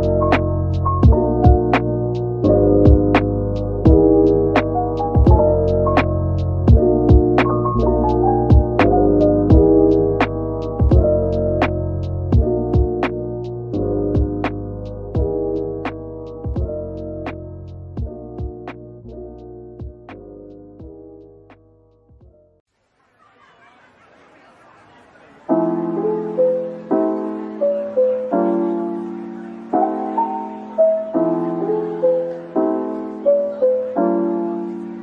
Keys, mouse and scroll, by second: 0.8 ctrl+z, 1.1 ctrl+z, 1.6 ctrl+z, 2.6 ctrl+b, 4.4-4.8 scroll up 1, 4.8 scroll down 1, 10.9 Tab, 11.4-12.2 scroll down 1, 12.3 /, 14.2 middle click, 16.7-17.1 scroll up 1, 17.8 shift+click, 21.4 middle click, 23.0 shift+click, 23.3 middle click, 25.4 shift+click, 26.6 /, 27.1 middle click, 28.1 double click, 29.1 shift+click, 29.8-30.7 typing, 31.9-32.6 scroll down 1, 32.4-33.2 typing, 33.2 middle click, 34.5 ctrl+j.